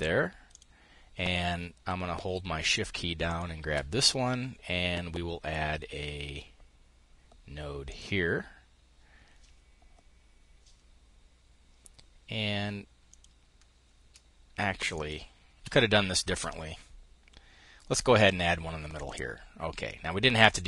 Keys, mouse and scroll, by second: 2.7 shift+click, 7.3 click, 12.6 click, 14.4-16.6 shift+drag, 18.4 click.